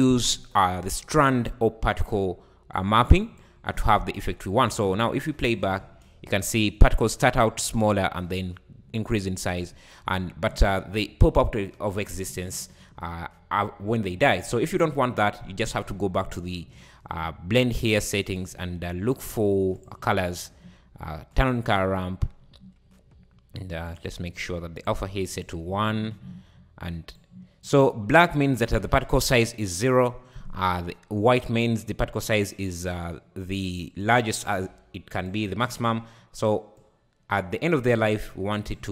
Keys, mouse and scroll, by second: 0.0-3.1 drag, 4.5 `, 5.4 shift+right click, 5.8 space, 8.0 `, 8.8 `, 10.1 scroll down 3, 14.4 space, 15.1-15.4 scroll down 2, 15.4-16.1 scroll up 13, 18.3-20.1 drag, 20.1-21.3 scroll down 10, 21.3-21.9 drag, 21.9-23.9 scroll down 11, 23.9 click, 27.2-30.2 drag, 32.1-35.3 drag.